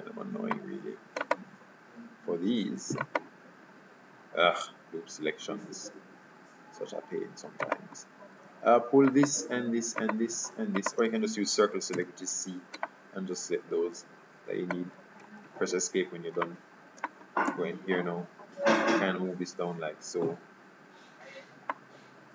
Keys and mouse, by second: 0.4 middle click, 1.4-3.0 right drag, 3.1-4.5 right drag, 4.8-7.8 middle drag, 7.8-12.7 right drag, 12.0 c, 16.5-17.6 middle drag, 17.6 KP_3, 18.8-20.4 drag.